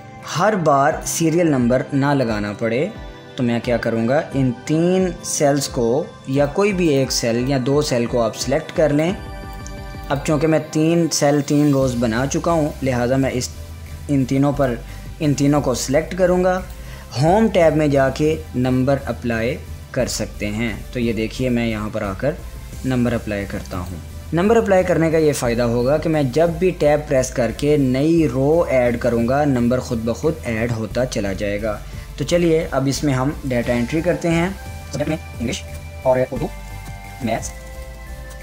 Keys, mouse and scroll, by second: 3.5 click, 4.4-12.5 drag, 13.3-17.1 drag, 24.3 click, 30.0 Tab, 32.8 click, 34.8-38.4 typing.